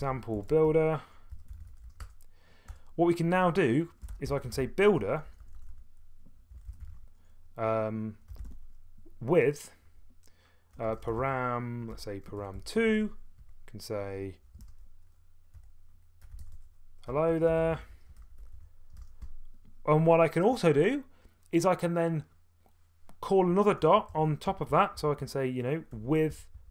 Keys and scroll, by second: 0.0-2.3 typing, 2.7 Return, 3.8-9.0 typing, 10.7-18.5 typing, 21.3 typing, 23.8 BackSpace, 24.1 Return, 24.5 Tab, 24.7 Tab, 24.9 Tab, 25.9-26.5 typing, 26.3 Tab.